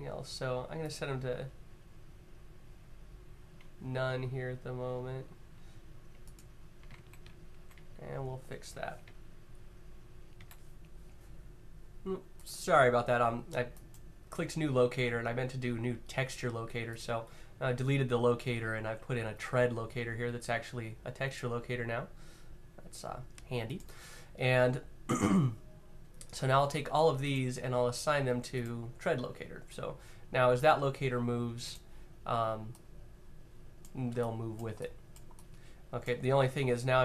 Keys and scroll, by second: 6.7 z, 7.2 z, 10.1 Left, 10.1 Right, 10.1 e, 31.3 q.